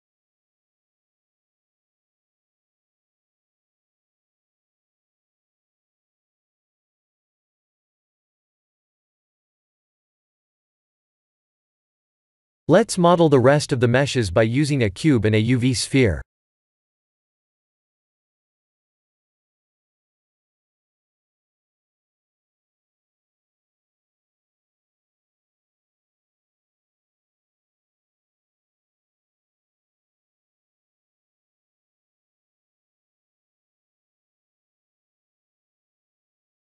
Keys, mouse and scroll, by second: 0.4-0.9 scroll down 6, 0.9 shift+z, 1.3 middle click, 2.0 click, 2.4 ctrl+1, 3.0 middle click, 3.8 middle click, 4.4 ctrl+3, 5.0 middle click, 6.0 Tab, 6.9 Tab, 7.2 middle click, 7.2 middle click, 10.6 middle click, 10.8 middle click, 11.4 KP_1, 12.1 click, 13.3 shift+a, 16.6 s, 18.4 s, 19.9 s, 22.8 g, 24.0 r, 24.8 g, 25.6 s, 27.1 s, 27.9 s, 29.5 shift+d, 31.0 r, 32.0 shift+d, 33.1 r, 34.1 shift+d, 35.1 r, 36.5 click.